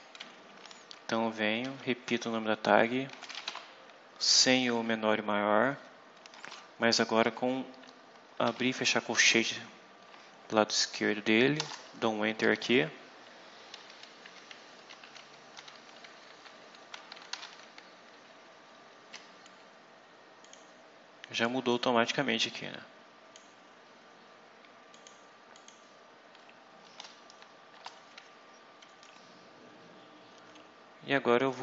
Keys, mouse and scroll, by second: 1.5-3.8 typing, 6.2 space, 8.3 shift+[, 11.5 Return, 12.2 Up, 12.4 End, 12.8 Down, 13.7 Down, 14.4 Home, 14.8 shift+End, 15.4 ctrl+x, 15.8 ctrl+Up, 16.7 ctrl+Tab, 17.2 ctrl+v, 20.3 click, 21.6-23.4 drag, 24.8 click, 25.4 click, 27.6 Return.